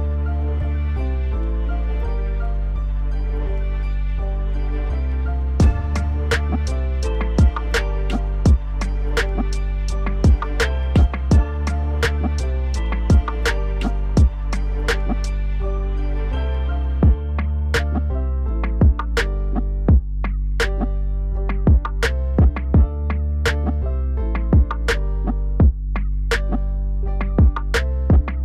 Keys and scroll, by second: 2.6 F4, 9.0 ctrl+a, 15.8 alt+w.